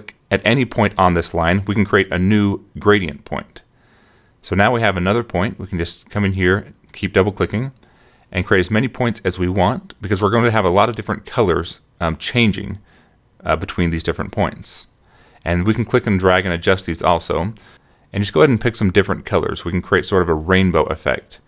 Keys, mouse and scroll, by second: 6.0 click, 6.6 click, 7.1 click, 7.6 click, 8.0 click, 8.5 click, 9.0 click, 10.1 click, 11.0 click, 11.6 click, 12.1 click, 12.6 click, 13.1 click, 13.7 click, 14.1 click, 14.6 click, 15.0 click, 15.3 scroll down 1, 16.1 click, 16.7 click, 17.1 click, 17.8 scroll down 1, 18.4 click, 19.0 click, 19.3 click, 19.8 click, 19.9 scroll down 1, 20.4 click, 21.0 click.